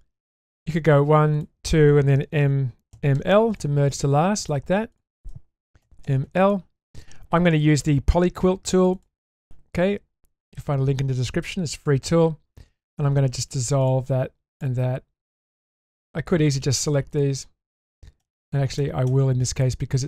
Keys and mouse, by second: 14.5 ctrl+click, 15.4 ctrl+click, 15.9 ctrl+click, 16.4 ctrl+click, 17.1 ctrl+click.